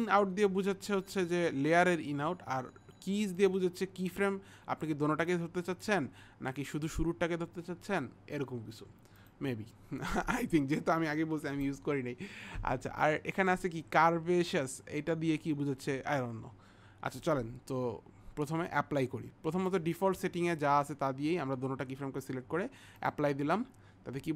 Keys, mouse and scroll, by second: 3.4 click, 9.2 click, 18.7 click, 23.0 click.